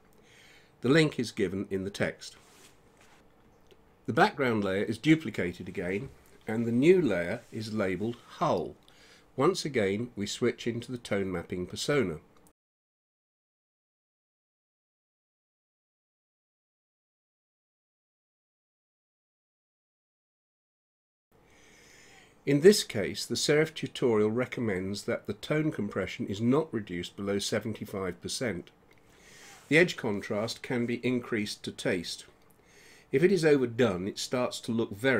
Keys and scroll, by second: 0.9 space.